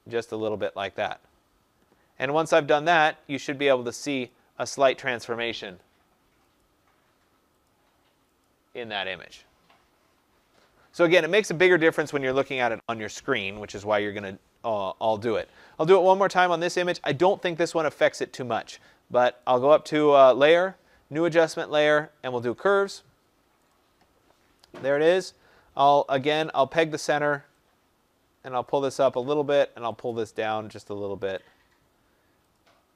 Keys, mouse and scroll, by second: 1.0 click, 2.5 click, 3.4 click, 4.2 click, 4.8 click, 5.8 click, 6.6 click, 7.6 click, 8.4 click, 15.4 click, 19.4 click, 22.5 click, 23.7 click, 26.4 click, 28.6 click, 31.3 click.